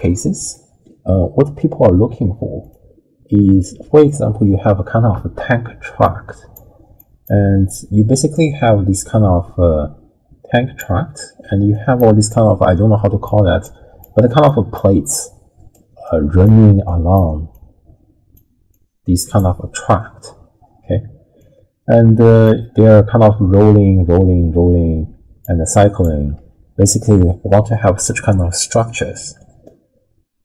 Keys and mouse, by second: 0.0 drag, 0.4 click, 2.6 click, 4.0 click, 5.1-26.4 typing, 6.0 click, 7.0 click, 8.3-10.8 drag, 11.7 click, 12.3-13.3 drag, 13.6 click, 14.5 click, 15.0 click, 16.0 click, 16.9 click, 17.5 click, 18.7 click, 21.4-22.5 drag, 23.2-25.4 drag, 25.7 click.